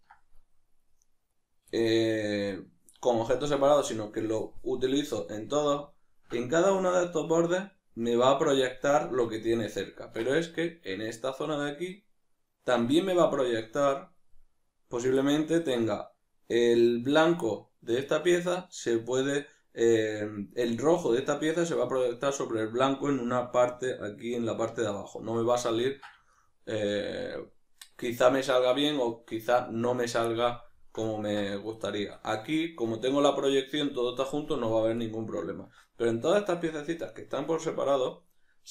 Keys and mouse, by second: 1.3 right click, 1.8-38.7 shift+middle drag, 12.8 click.